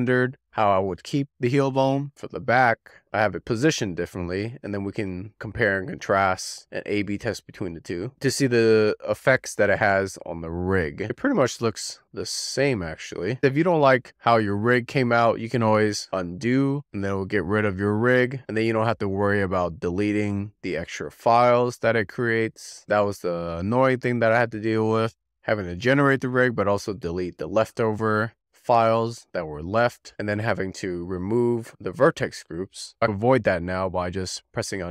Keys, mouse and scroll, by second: 11.0 scroll down 10, 11.4 click, 12.1-20.6 shift+middle drag, 21.9-29.9 middle drag, 30.9 alt+middle click, 32.2-33.3 scroll up 3, 33.7-34.9 drag.